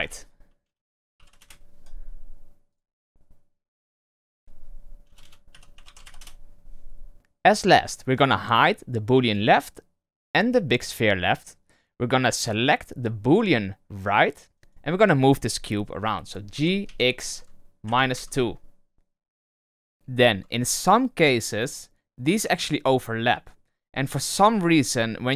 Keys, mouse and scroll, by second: 0.7 BackSpace, 1.3 \, 2.6 click, 2.8-5.1 drag, 5.1 BackSpace, 9.2 click, 10.8 click, 13.2 click, 14.5 right drag, 14.6 g, 16.2 scroll down 2, 16.5 g, 19.9-21.3 scroll down 2, 21.3-25.3 middle drag.